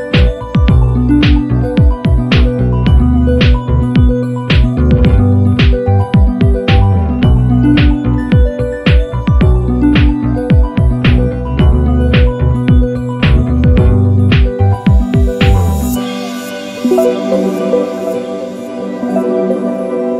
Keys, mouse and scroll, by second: 0.5 click, 2.3 click, 3.1-4.8 ctrl+shift+drag, 5.2-5.6 ctrl+scroll up 2, 6.0-8.0 ctrl+drag, 8.1-8.4 ctrl+scroll down 2, 8.7 ctrl+shift+click, 10.4 click, 11.2 click, 11.9 click, 12.6 click, 14.6 ctrl+d, 15.4 click, 16.2-19.6 ctrl+drag.